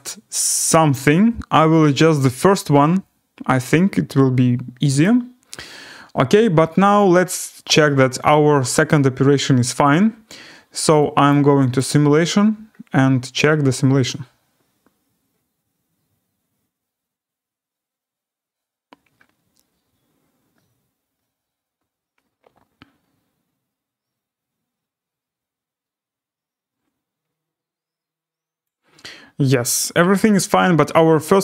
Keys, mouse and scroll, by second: 5.0 right click, 7.7 right click, 8.7 click, 11.3 click, 11.9 click, 12.7-13.1 scroll, 28.6 click, 29.2-29.9 scroll.